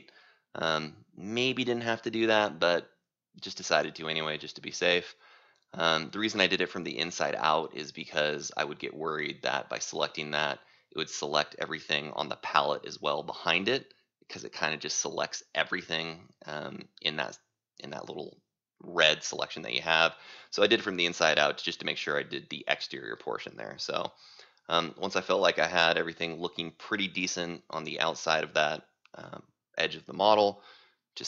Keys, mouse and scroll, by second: 1.1 right click, 1.3-3.5 scroll, 3.5 right click, 4.5 c, 5.3 right click, 5.5-7.3 scroll down 8, 7.3-8.9 scroll, 8.9-9.7 scroll up 1, 9.7 right click, 10.3 c, 11.7 click.